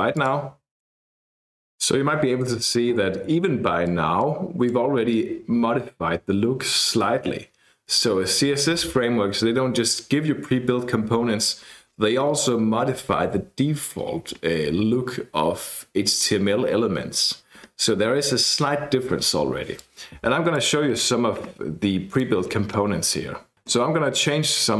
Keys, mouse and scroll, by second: 0.2 click, 0.9 click, 3.9-5.1 drag, 19.8-21.1 drag, 22.2 click.